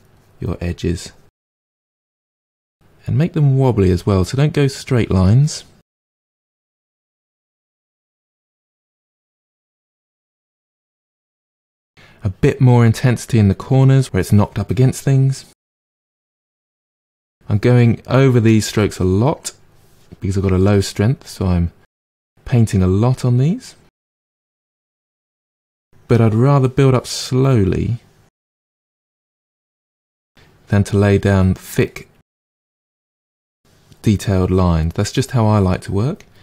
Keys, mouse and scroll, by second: 5.4 middle click, 6.1-7.6 drag, 7.6 f, 7.9-9.8 drag, 9.8 middle click, 10.1-14.3 drag, 14.3-15.3 middle drag, 15.3 click, 15.7 middle click, 15.7-22.4 drag, 22.4 middle click, 22.8 click, 23.7 middle click, 24.1-26.9 drag, 26.9 middle click, 27.5-28.9 drag, 28.9 middle click, 29.7-31.7 drag, 31.7 middle click, 32.2 click, 32.7 middle click, 33.0-35.8 drag, 35.8 middle click, 36.2 click.